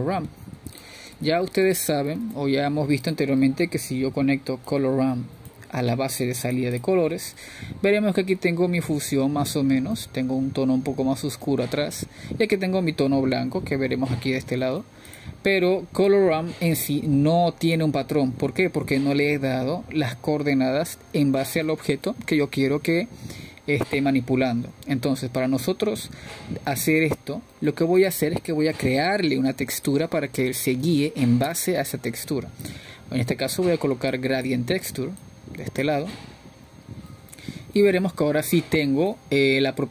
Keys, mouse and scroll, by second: 2.0 x, 2.5 click, 5.5 shift+a, 10.3 click, 10.6-18.4 middle drag, 18.4-24.1 drag, 24.1-24.8 scroll up 3, 24.9-31.3 middle drag, 31.3-34.8 drag, 34.8 shift+a, 38.5-39.2 drag.